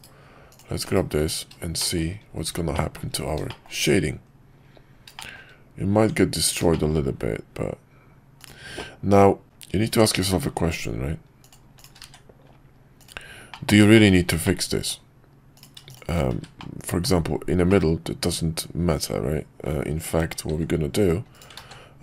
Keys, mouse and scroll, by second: 1.8 shift+middle click, 2.7 middle drag, 3.5 middle drag, 5.1 shift+middle drag, 5.9 Tab, 6.7 shift+middle click, 8.8 middle click, 11.4 click, 12.1 1, 13.0 click, 13.5 middle click, 13.9 middle click, 14.4 middle click, 15.6 click, 15.9 shift+click, 16.6 middle click, 17.7-19.6 middle drag, 20.5 alt+v, 21.6 ctrl+z.